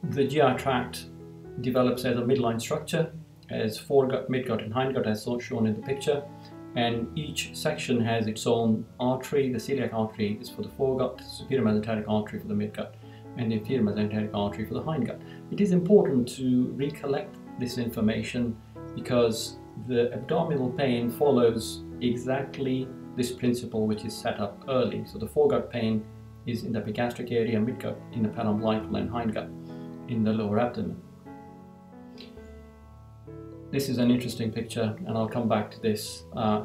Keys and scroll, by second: 31.5 Down.